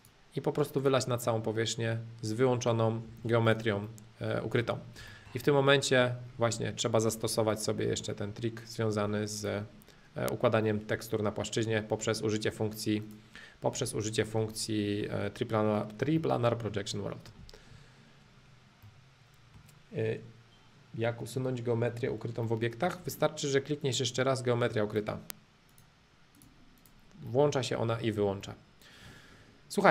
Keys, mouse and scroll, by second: 0.0-2.0 drag, 3.0 space, 3.8-5.0 middle drag, 5.2-6.2 shift+middle drag, 6.2-7.2 scroll up 2, 7.2 scroll up 1, 7.4 scroll down 2, 7.6-9.4 middle drag, 9.4-11.4 drag, 12.0-13.0 middle drag, 13.0-14.5 drag, 14.5-16.0 middle drag, 16.2-17.4 shift+middle drag, 18.8-20.8 middle drag, 22.4 middle click, 23.8-25.8 drag, 26.3-27.3 drag, 27.3 middle click, 28.5-29.9 shift+middle drag.